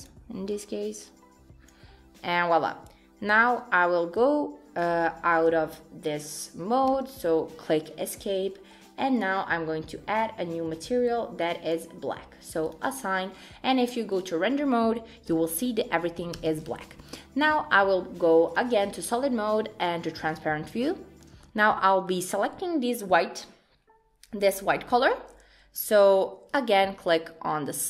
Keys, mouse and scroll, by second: 9.2 click, 10.8 click, 12.7 click, 13.1-14.4 scroll down 4, 14.4 click, 15.4 Tab, 16.4 Tab, 16.8-18.5 scroll up 3, 18.5 click, 20.9 shift+scroll up 1, 21.0 shift+middle click, 21.5-21.8 scroll up 3, 21.8 shift+middle click, 26.5 click.